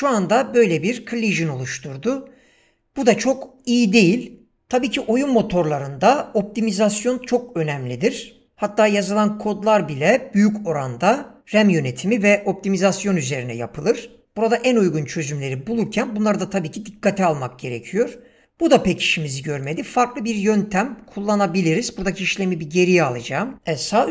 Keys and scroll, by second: 23.5 ctrl+z.